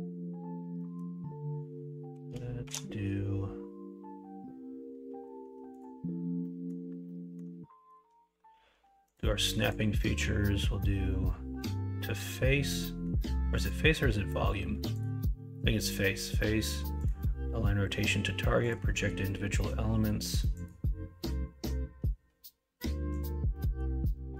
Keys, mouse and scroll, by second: 0.8 middle click, 2.6 shift+a, 6.5 middle click, 7.1-7.4 middle drag, 23.6 middle click, 24.1 middle click.